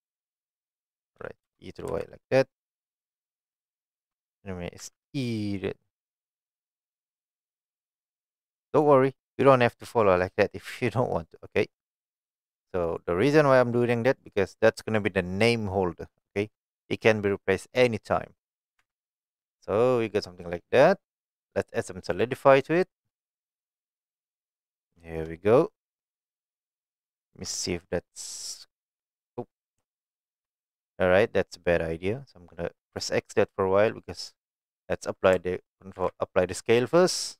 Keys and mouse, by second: 0.6 click, 1.5 KP_1, 1.9 KP_3, 3.1 shift+middle click, 4.9 e, 8.7 click, 9.3 middle click, 10.2-11.4 middle drag, 11.7 middle click, 12.3 middle click, 14.0 middle click, 18.5 middle click, 18.8 Tab, 19.1-20.9 middle drag, 23.0-24.2 drag, 24.4 middle drag, 25.2 shift+middle drag, 25.6 middle click, 27.1 shift+middle drag, 27.9-29.2 shift+middle drag, 29.9 shift+middle click, 32.9 click, 33.9 middle click, 36.0 ctrl+a.